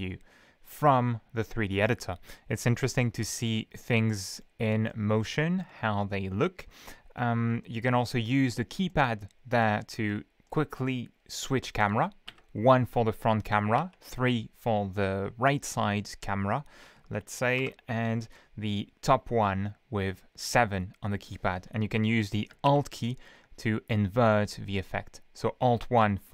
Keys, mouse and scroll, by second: 3.1-3.5 scroll up 1, 3.9 scroll up 1, 4.3 scroll down 1, 4.9-5.8 shift+middle drag, 5.9 shift+scroll up 2, 6.3 scroll down 1, 8.9 middle click, 9.1-9.8 scroll down 2, 10.1-10.5 middle drag, 10.5-10.9 scroll up 1, 12.3 KP_1, 13.8 KP_3, 17.6 KP_7, 20.5 scroll down 2, 22.7 alt+KP_1, 24.7-25.2 scroll down 2.